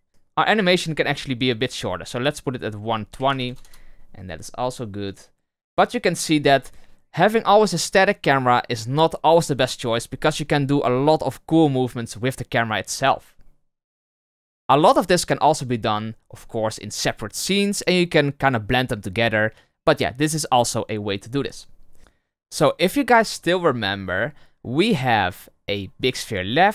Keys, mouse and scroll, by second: 0.1 space, 0.7-8.2 drag, 26.0 click.